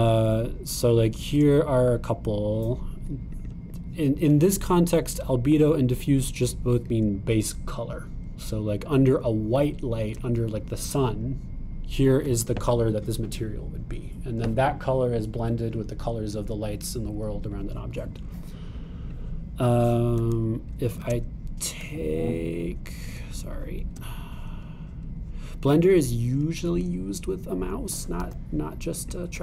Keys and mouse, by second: 21.2 super+click, 21.9 super+click, 22.1 shift+click, 22.8-29.4 super+drag, 29.3 g.